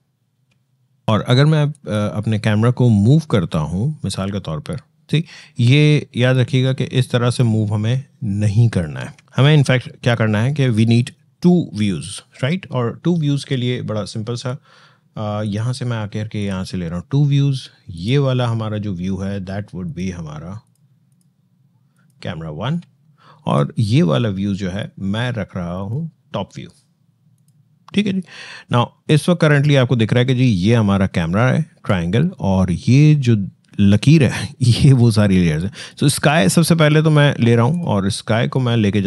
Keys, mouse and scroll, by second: 5.0 ctrl+shift+z, 5.6-8.9 shift+drag, 8.9 ctrl+shift+z, 17.6 shift+click, 25.6 shift+click, 28.0-28.7 shift+scroll down 1, 28.7 shift+scroll up 1.